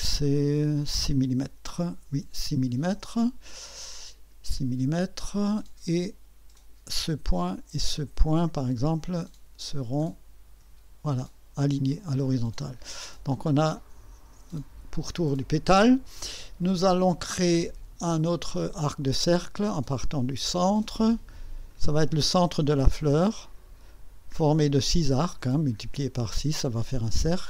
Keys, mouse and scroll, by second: 2.1 KP_6, 2.9 KP_Enter, 6.5 click, 7.9 click, 10.0 click, 11.0 scroll up 1, 13.3 scroll up 1, 13.7-14.4 right drag, 18.3 click, 21.7 click.